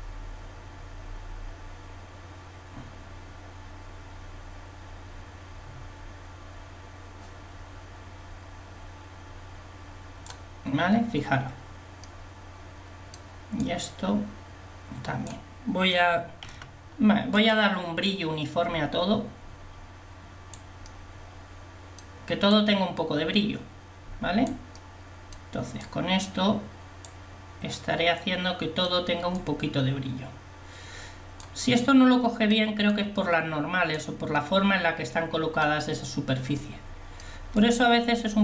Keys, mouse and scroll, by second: 12.2 middle click, 13.8-15.1 drag, 16.5 f, 23.9 click, 37.9 click.